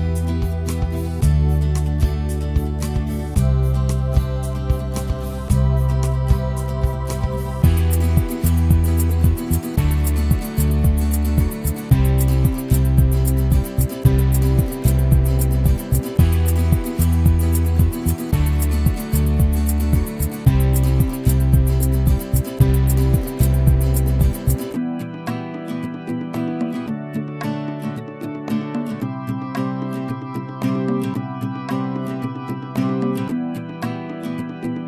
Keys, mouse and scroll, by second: 0.0 right click, 0.0 alt+click, 0.5 ctrl+z, 0.9 right click, 1.3 click, 2.2 ctrl+z, 2.4-26.2 alt+drag, 26.2 alt+middle click, 26.4 alt+right click, 26.5-28.9 alt+drag, 28.9 ctrl+z, 29.3 right click, 29.6-30.8 drag, 30.8 ctrl+z, 32.8 click, 34.3 click.